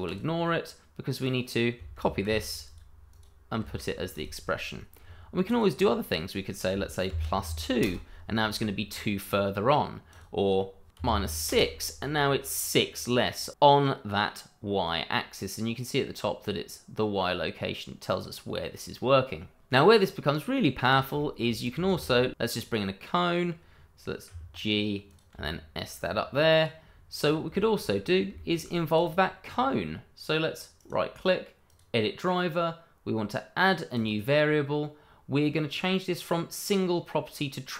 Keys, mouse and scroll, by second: 0.0 click, 2.2 ctrl+c, 2.6 click, 3.1 double click, 3.6 ctrl+v, 4.1 click, 7.1 shift+=, 7.4 2, 7.8 Return, 10.1 click, 10.9 BackSpace, 10.9 -, 11.0 6, 11.3 Return, 12.8 right click, 13.5 click, 20.8 scroll down 1, 21.2 shift+middle click, 21.9 shift+a, 22.6 click, 24.3 g, 25.0 click, 25.3 s, 26.5 click, 27.2 scroll up 1, 27.5 shift+middle click, 28.0 scroll down 1, 28.3 shift+middle click, 28.9 click, 30.8 right click, 31.7 click, 34.0 click, 34.9-35.7 scroll down 1, 35.7 click.